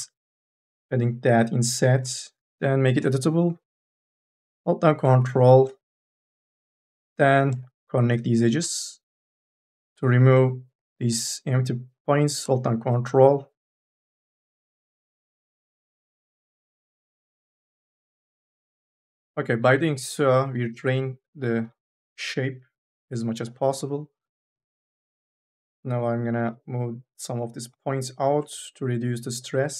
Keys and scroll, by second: 0.0-1.1 typing, 2.8 c, 3.3 1, 4.0 m, 4.3 e, 9.9 ctrl+z, 20.4 3, 20.6 e, 21.5 3, 21.6 e, 23.6-26.5 typing.